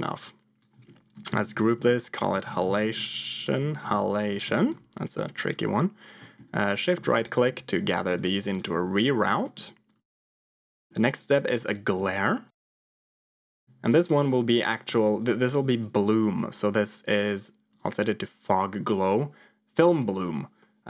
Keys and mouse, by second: 0.0 click, 1.2 ctrl+j, 1.7 F2, 6.1 middle click, 6.5 click, 7.0 shift+click, 8.0 g, 8.6 g, 9.8 click, 10.2 middle click, 11.8-12.9 drag, 15.3 click, 16.0-17.8 drag.